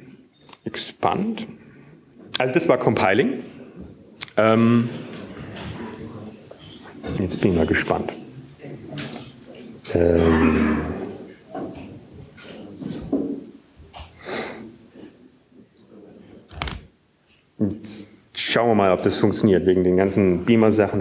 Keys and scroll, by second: 16.8 alt+`.